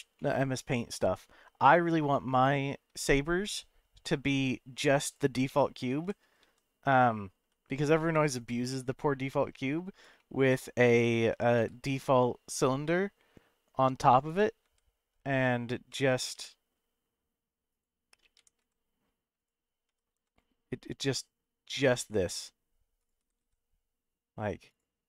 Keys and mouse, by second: 0.2-1.0 middle drag, 2.9 shift+a, 5.6 middle drag, 6.0 g, 6.4 x, 7.4 y, 8.4 click, 8.7-9.7 middle drag, 10.2 shift+middle click, 11.5 shift+a, 14.6 g, 15.8 x, 16.3 y, 17.7 click, 18.4 g, 18.6 z, 19.4 click, 19.9 s, 20.1 z, 23.0 click, 23.2 g, 23.4 z, 24.7 click.